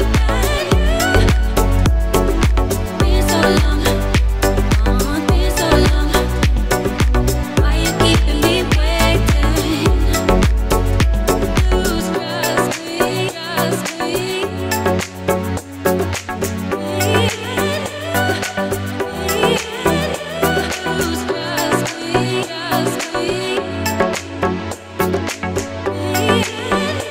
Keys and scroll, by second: 15.0 ctrl+v.